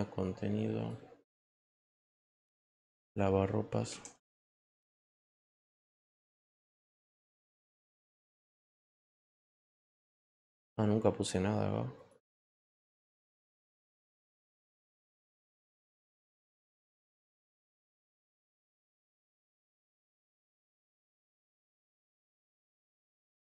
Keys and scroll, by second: 3.5-5.6 typing.